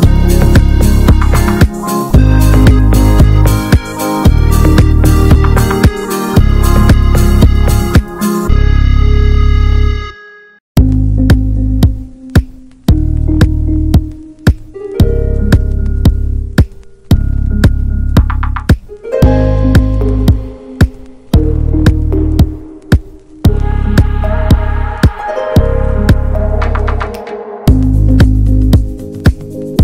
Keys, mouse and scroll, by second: 0.2 2, 0.3 click, 0.7-1.7 alt+shift+drag, 1.7 x, 2.3 ctrl+z, 2.7 x, 4.2 click, 5.0-6.0 drag, 6.0 shift+middle click, 6.6 s, 7.7 s, 8.5 click, 9.3 s, 10.1 click, 11.6 Tab, 11.7 click, 11.9 middle click, 12.5 ctrl+a, 13.1 middle click, 13.8 alt+z, 14.1 click, 14.5 alt+middle click, 14.6 alt+middle click, 15.0 ctrl+s, 15.2 Tab, 15.3 middle click, 15.9 3, 16.1 click, 16.6 alt+z, 16.7 shift+middle click, 17.7 i, 18.9 Tab, 19.2 alt+middle click, 19.5 Tab, 20.2 s, 21.4 Tab, 21.5 click, 21.7 shift+middle click, 22.1 ctrl+s, 22.3 click, 22.4 ctrl+a, 22.6 alt+z, 22.9 shift+middle click, 23.1 scroll down 2, 23.3 ctrl+s, 23.4 ctrl+click, 23.6 Tab, 23.9 alt+z, 24.1 scroll up 1, 24.2 click, 24.7 s, 25.2 1, 25.3 click, 25.7 s, 26.5 shift+middle click, 26.8 click, 27.1 s, 28.0 click, 29.6-29.8 drag.